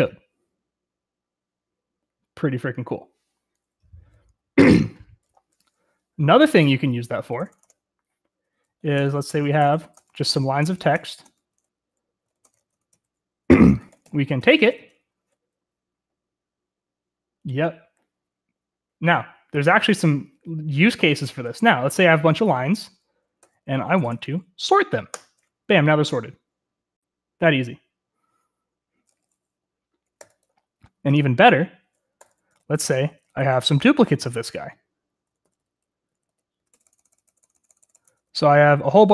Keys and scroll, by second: 7.2 o, 7.4 Return, 7.5 Return, 7.6 Return, 8.6-15.0 typing, 23.4-24.7 typing, 25.1 Return, 30.2 u, 31.9-39.1 typing, 37.1 Return, 37.3-37.9 Return.